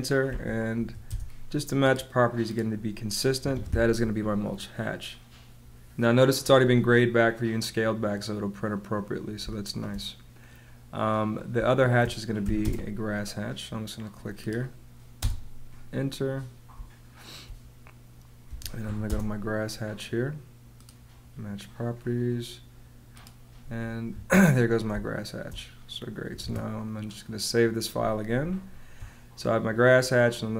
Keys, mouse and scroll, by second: 0.2 m, 0.7 a, 1.0 space, 3.3 Escape, 9.3 space, 11.5 space, 12.4 h, 13.0 space, 15.1 space, 16.8 space, 18.4 m, 18.7 a, 19.0 space, 24.0 Escape, 24.8 space, 26.3 super+s, 28.3 space.